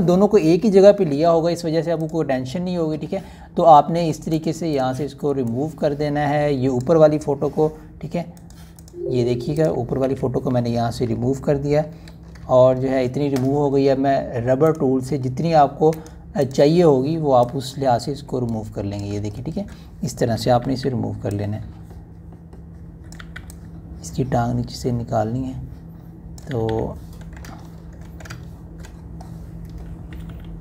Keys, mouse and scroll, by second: 5.2 right click, 5.6-7.9 drag, 10.9 Delete, 12.7 ctrl+d, 13.4-13.8 ctrl+alt+scroll up 1, 15.5 right click, 17.3-20.1 drag, 20.1 ctrl+alt+scroll up 1, 20.7-21.5 scroll down 1, 21.5 [, 21.6 [, 21.7 [, 21.8 [, 22.2-24.0 drag, 24.0 [, 24.2 [, 24.3-27.5 drag, 27.3 [, 27.5 [, 28.4 ctrl+alt+scroll up 1, 29.4 ctrl+scroll up 1, 29.7-30.1 scroll down 2.